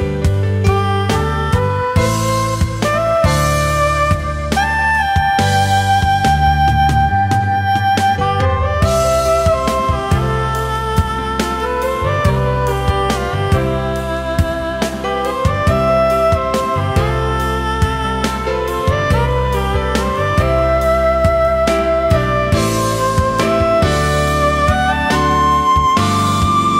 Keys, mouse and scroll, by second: 2.0 alt+scroll down 1, 2.1 space, 3.5 alt+scroll up 1, 5.1 ctrl+z, 5.8 alt+scroll down 1, 6.0 space, 8.3 ctrl+z, 8.7 alt+scroll up 1, 14.6 ctrl+shift+a, 15.1 alt+scroll down 1, 15.4 space, 16.1 alt+scroll up 1, 17.3 alt+scroll up 1, 17.9 space, 20.5 space, 23.6 space.